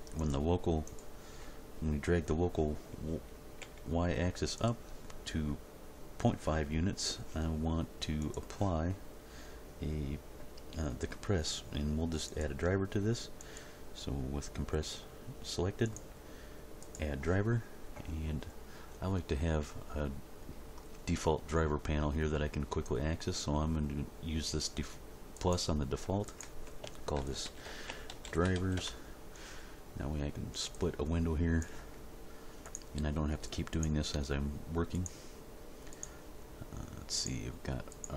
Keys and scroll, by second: 3.6 g, 27.1-28.5 typing, 28.7 Return.